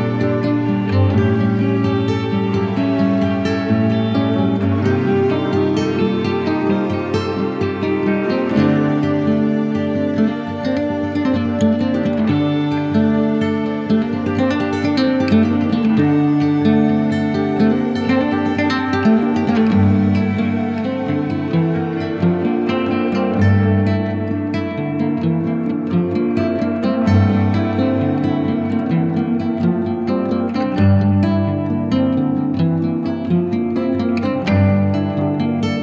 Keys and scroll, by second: 19.3 z, 33.7 super+i, 35.0 b.